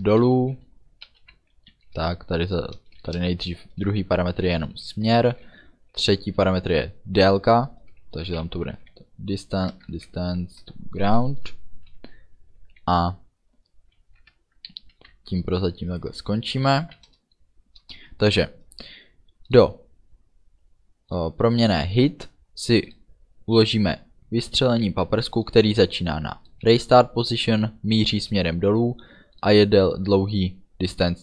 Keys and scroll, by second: 1.9 d, 3.1 Return, 5.5 space, 8.5-9.9 typing, 10.6 Return, 14.3 BackSpace, 15.0 Right, 17.9 Return.